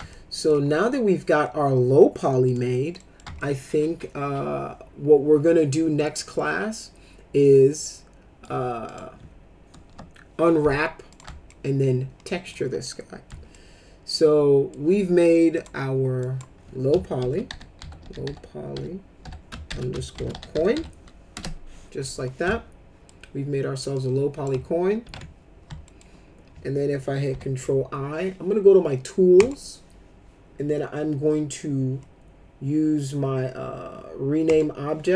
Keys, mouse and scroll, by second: 0.1 alt+middle click, 2.4 click, 3.0 middle click, 3.4-6.0 alt+middle drag, 6.3-8.4 alt+middle drag, 8.9 click, 9.8 Delete, 11.1 click, 11.5-12.5 alt+middle drag, 12.8 middle click, 13.5-14.7 alt+middle drag, 15.5 click, 16.2 click, 16.9-21.2 typing, 21.3 Return, 22.4 alt+middle click, 23.9 click, 25.0 ctrl+z, 25.8 alt+middle click, 27.3 ctrl+i, 29.3 click, 34.4 click.